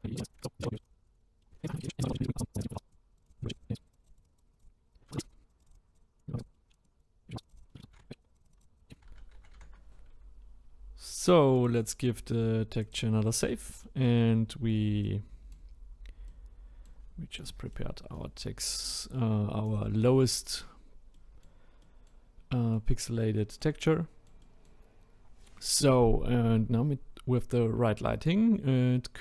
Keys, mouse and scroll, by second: 0.3-0.6 drag, 0.6 middle drag, 0.7-1.1 drag, 1.1 middle click, 1.2 click, 1.4 middle click, 1.6 scroll up 4, 1.9 click, 2.1 shift+middle click, 2.7 scroll up 1, 2.9 click, 3.3-4.0 drag, 4.2 click, 4.6 drag, 4.7-5.2 scroll down 2, 4.9 drag, 5.6 click, 6.4 click, 6.5 middle click, 6.6 scroll up 2, 7.4 click, 7.6 scroll down 5, 7.8 ctrl+z, 8.0 middle click, 8.1 scroll up 5, 8.4-8.8 drag, 8.8 scroll down 4, 9.0-9.5 ctrl+z, 10.6-11.6 scroll down 1, 11.6-13.4 drag, 13.4-13.8 scroll down 1, 13.8-14.3 middle drag, 14.3-15.1 scroll up 5, 15.1-19.7 middle drag, 19.7 click, 20.6-21.3 scroll down 1, 21.3-29.2 middle drag.